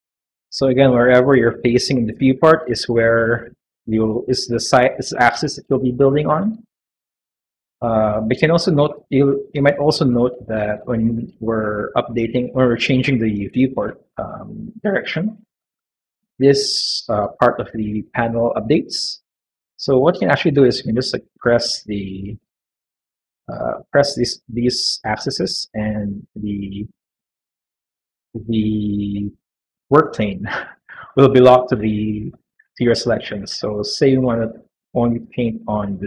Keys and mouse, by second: 0.2-4.7 middle drag, 5.0-8.1 middle drag, 10.7-14.8 middle drag, 19.4 middle click, 21.6 click, 23.5 click, 24.2 click, 25.7 click, 26.2 click, 26.8-28.4 middle drag, 31.3-33.2 middle drag, 34.9 click.